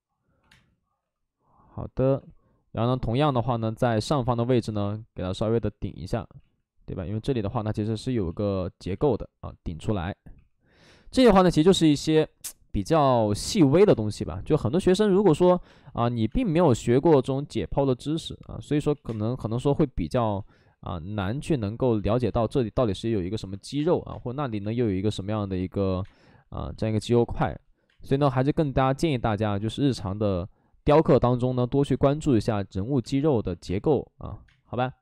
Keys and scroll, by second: 0.3 2, 0.4 space, 2.0 ctrl+z, 2.0 2, 6.2 ctrl+z, 6.2 1, 6.3 ctrl+z, 7.4 ctrl+z, 8.2 ctrl+z, 10.3 2, 13.8-16.5 typing, 18.6 ctrl+z, 19.0 ctrl+z, 19.0 space, 19.4 2, 20.3 ctrl+z, 23.7 space, 24.5 space, 24.8 ctrl+z, 25.9 ctrl+z, 25.9 space, 27.0 space, 32.8-35.0 typing.